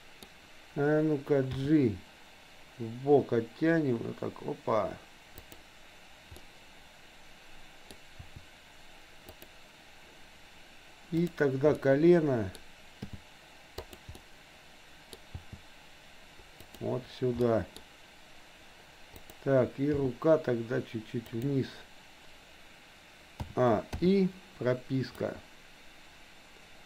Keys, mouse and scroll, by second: 1.7 g, 6.3 scroll up 1, 6.4-7.9 middle drag, 8.2 r, 11.2 click, 11.8 middle click, 13.1 g, 14.2 middle click, 15.1 scroll down 1, 15.3 g, 17.3 scroll up 1, 17.4 middle click, 19.2 click, 20.1 g, 23.4 a, 24.1 i, 25.3-26.8 drag.